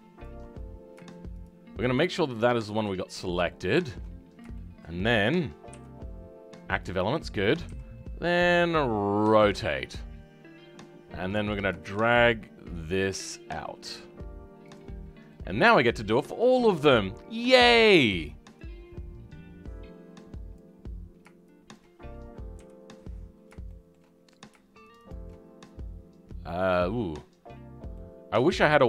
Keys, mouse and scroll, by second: 0.6-1.4 scroll up 2, 1.4 shift+Left, 1.9 shift+Left, 2.4-3.4 scroll down 5, 3.4 shift+middle click, 4.1-4.5 scroll down 3, 4.5-13.1 shift+middle drag, 13.1 g, 15.3-20.5 middle drag, 20.5 click, 22.5 KP_3, 23.6 shift+middle click, 24.1-24.9 scroll up 5, 25.0-26.0 shift+drag, 26.0-26.8 scroll down 5, 26.8-27.9 scroll down 4, 27.9-28.8 middle drag.